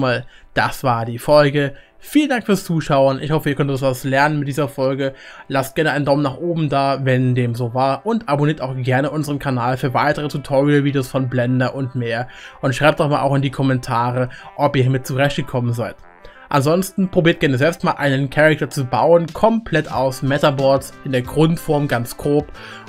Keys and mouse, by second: 0.0-9.0 middle drag.